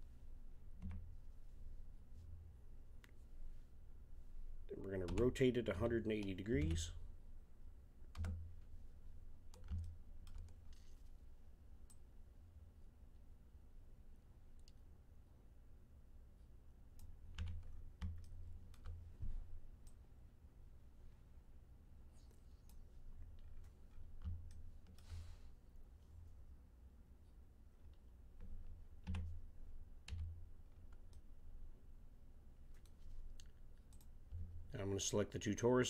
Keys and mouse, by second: 0.8 KP_1, 5.0 r, 9.8-11.9 middle drag, 11.9-13.6 drag, 17.3 z, 17.7 middle click, 17.9-18.3 middle drag, 19.8 click, 23.4 middle click, 29.0 a, 30.1 z, 33.9-35.7 right drag.